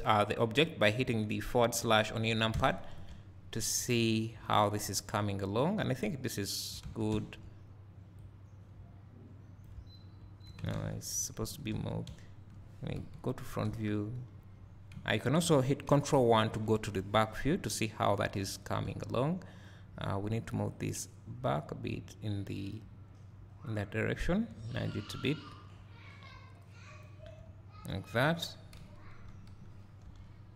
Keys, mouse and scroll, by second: 2.5 KP_Divide, 5.2-28.0 drag, 6.9 Tab, 9.7 `, 10.8 ctrl+z, 11.8 Tab, 13.0 KP_1, 13.7 Tab, 14.4 KP_3, 16.2 ctrl+KP_1, 17.6-18.9 scroll up 2, 18.9-20.8 scroll up 1, 24.6 `, 27.4 `, 28.7 KP_1, 29.3 KP_3, 30.1 Tab.